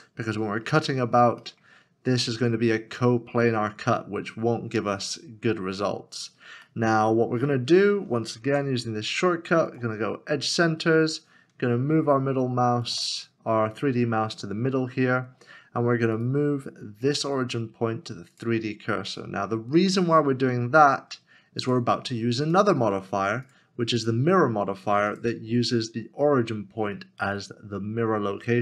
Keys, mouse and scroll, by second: 0.4 scroll down 1, 1.4 middle click, 2.1 scroll up 1, 4.0 scroll up 1, 4.2 scroll down 1, 5.1 middle click, 8.3 ctrl+shift+Tab, 11.1 shift+right click, 11.7 ctrl+shift+right click, 16.2 right click.